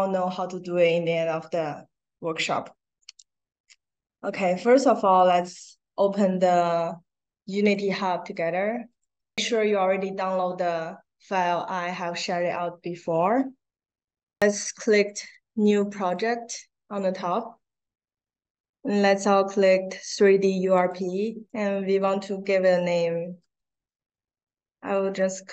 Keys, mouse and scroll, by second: 3.0 click, 5.1 click, 16.0 click, 19.1 scroll down 2, 20.7 click, 23.2 w, 23.8 r.